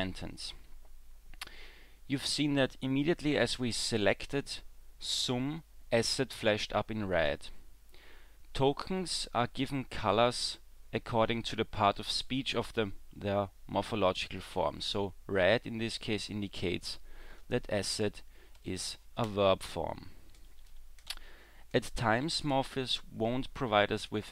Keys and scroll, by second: 21.1 e.